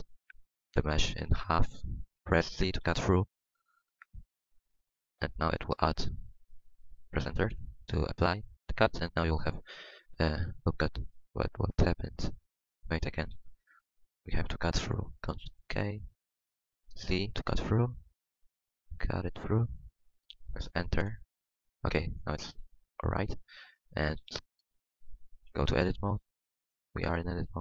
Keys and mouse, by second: 10.7 middle click, 12.5 ctrl+z, 13.3 KP_1, 15.0 KP_1, 15.5 k, 21.2-22.5 middle drag, 22.6 KP_1, 24.1 s.